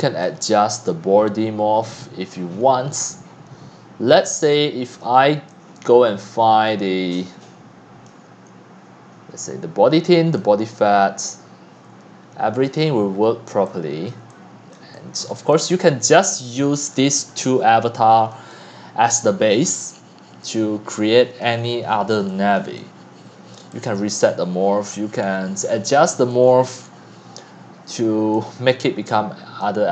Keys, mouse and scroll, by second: 0.0-0.7 typing, 0.2-1.8 drag, 2.6 click, 5.0 click, 5.8 click, 10.3-11.3 right drag, 12.8 scroll down 4, 13.9-16.4 typing, 14.1 click, 14.7 drag, 15.3-15.7 drag, 17.5-18.3 drag, 18.7-21.4 drag, 21.4 middle click, 21.4-22.1 scroll, 22.6 click, 23.1 c, 25.2-25.9 scroll down 10, 26.3 right click, 26.5-27.2 scroll, 28.3-28.9 drag, 29.6 click.